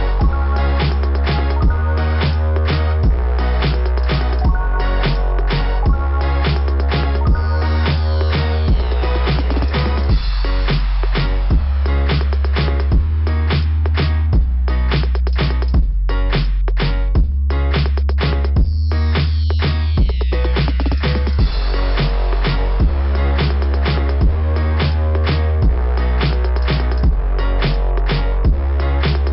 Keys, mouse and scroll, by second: 0.1 scroll down 2, 2.2 click, 2.4 click, 2.6 click, 2.7 click, 2.9 click, 4.6 click, 4.8 click, 5.0 click, 5.1 click, 5.3 click, 5.4 click, 5.5 click, 8.6 scroll down 2, 9.0 scroll up 2, 9.1 scroll down 2, 9.2 scroll up 2, 13.3 scroll down 2, 16.2 click, 16.4 click, 16.6 click, 16.8 click, 16.9 click, 18.7 click, 18.9 click, 19.1 click, 19.2 click, 20.0 click, 20.8 click, 20.9 click, 22.3 click, 22.4 click, 24.9 click, 25.0 click, 25.1 click, 25.2 click, 27.7 click, 28.1 click, 28.3 click, 28.5 click, 28.6 click.